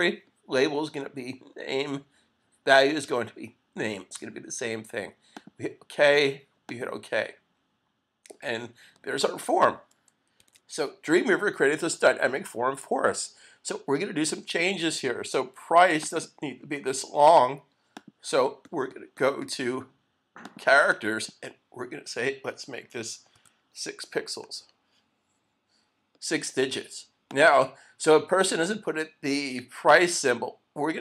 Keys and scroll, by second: 10.4 super+s, 24.4 Return.